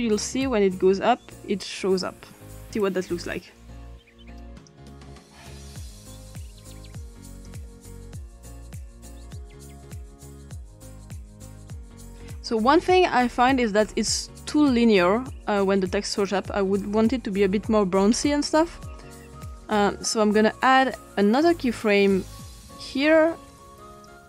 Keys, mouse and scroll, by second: 3.8 click, 4.7 click, 7.3 click, 8.1 click, 9.2 click, 12.1-13.8 drag, 14.4-16.3 drag, 16.8 click, 19.4 click, 21.3 click, 22.1 click, 23.9 click.